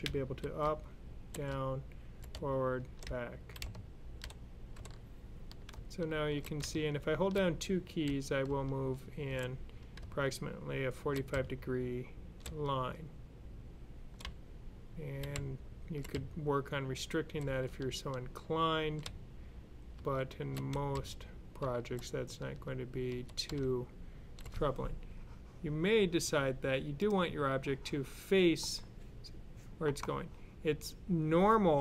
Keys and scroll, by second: 0.5-11.7 typing, 12.8-18.9 typing, 19.4 Up, 19.8 Left, 20.8 Down, 21.4 Down, 21.5 Left, 22.0-24.1 typing.